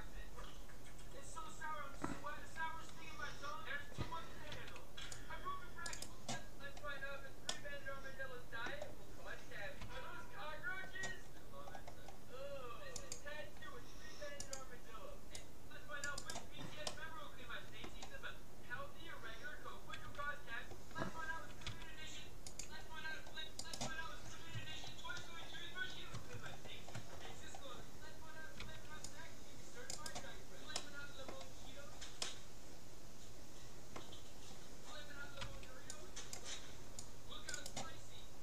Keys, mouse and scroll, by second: 4.6 c, 6.0-7.7 drag, 7.0 middle click, 7.7-9.2 middle drag, 9.8 c, 16.4-18.0 right drag, 16.8 middle click, 17.0 click, 17.0-18.6 middle drag, 17.2 click, 20.0 c, 21.6 c, 23.8-25.6 right drag, 24.8-29.4 middle drag, 28.6 c, 30.8-34.0 middle drag, 35.4 c, 37.6-38.4 drag.